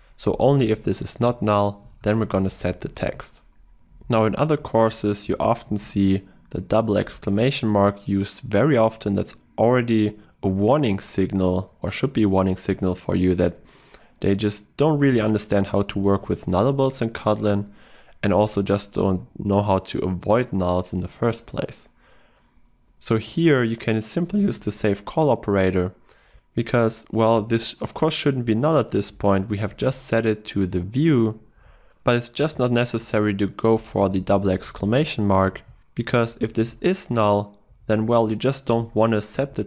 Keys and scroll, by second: 2.5 ctrl+shift+Right, 26.3 ctrl+w, 27.2 ctrl+w, 28.9 ctrl+w, 32.4 ctrl+w, 33.1 ctrl+w, 36.6 ctrl+w, 37.2 ctrl+w.